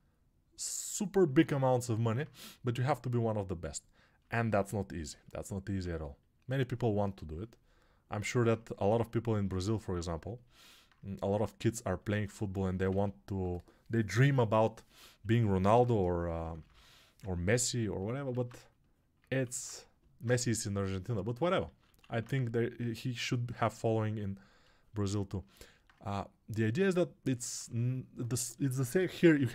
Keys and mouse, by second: 2.1-15.2 drag, 12.8 ctrl+r, 15.2-19.5 right drag, 15.2 1, 15.6 p, 16.1 [, 18.2 alt+q, 19.5-29.5 drag, 23.1 1, 27.5 2.